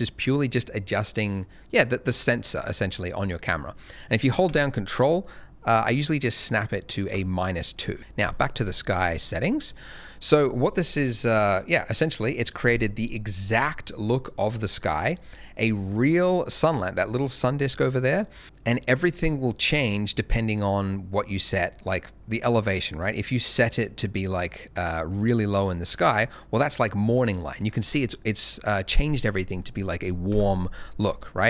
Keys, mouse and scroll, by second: 3.5 click, 7.9 middle click, 8.2 click, 8.8 middle click, 10.2 scroll down 1, 10.8 middle click, 21.7 click, 30.3 KP_0, 31.1 scroll up 1.